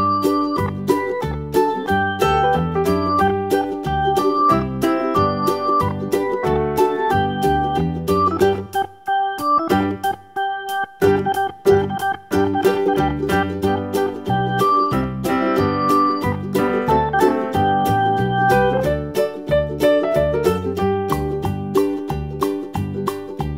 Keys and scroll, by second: 7.9 super+d, 22.4 super+d.